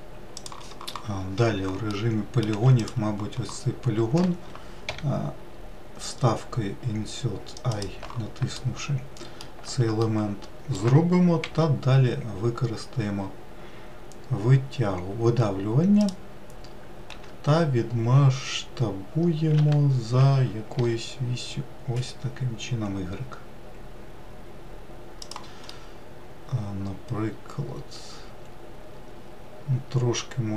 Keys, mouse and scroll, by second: 2.0 middle click, 2.6 3, 2.8 click, 4.9 i, 8.6-11.5 middle drag, 11.5 e, 17.2 s, 25.8-28.8 middle drag.